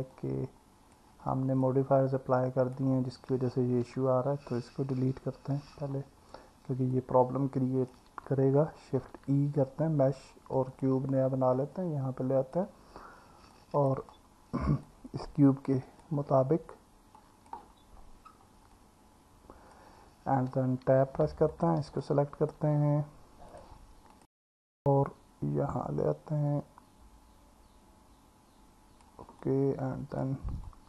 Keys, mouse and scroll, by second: 0.2 click, 1.7-2.8 alt+middle drag, 3.8 Tab, 5.2 Delete, 6.9-7.9 drag, 9.0 shift+a, 13.5 scroll down 1, 13.6 alt+middle click, 14.9 click, 17.2 click, 18.8-19.8 alt+middle drag, 20.9 Tab, 21.6 click, 22.0 alt+middle click, 23.5 click, 24.2 click, 25.1 click, 29.4 alt+middle click, 29.4 scroll down 1, 30.7 alt+middle click, 30.7-30.8 alt+scroll down 1.